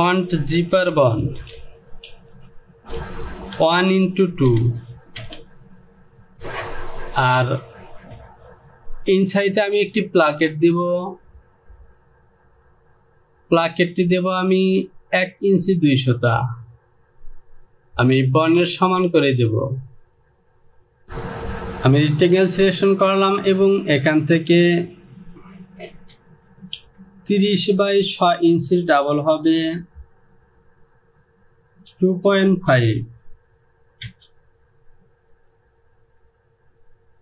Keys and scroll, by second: 0.8 z, 2.0-4.5 typing, 5.2 Return, 32.1 KP_2, 32.8 KP_5, 34.2 Return.